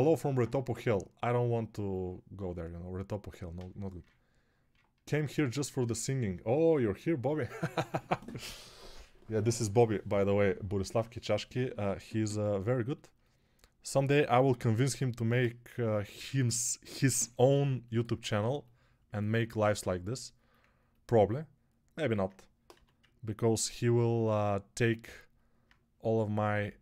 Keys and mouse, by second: 12.6-26.8 alt+shift+drag, 14.3 2, 22.6 x.